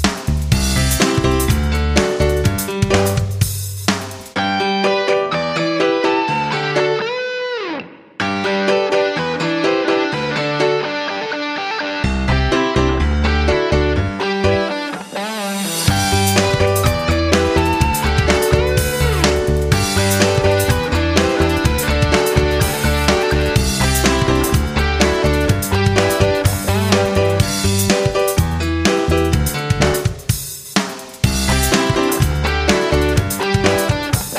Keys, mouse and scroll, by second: 8.0 F9, 11.1 click, 17.6 F9, 17.8 click, 29.6 Right, 29.8 Right.